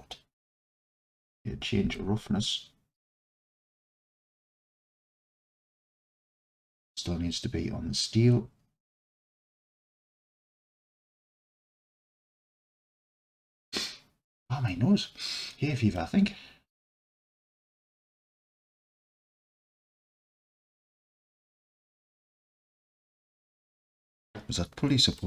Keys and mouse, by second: 2.0-4.0 drag, 4.7 click, 5.2-6.1 alt+drag, 6.5-9.5 drag, 10.0 click, 10.5-12.4 alt+drag, 16.0-16.8 drag, 19.7-21.2 alt+drag.